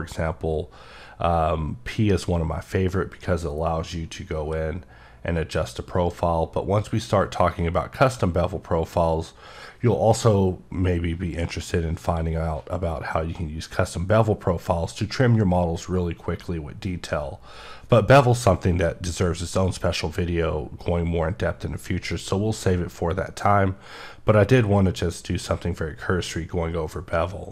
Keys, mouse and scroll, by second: 22.1 click.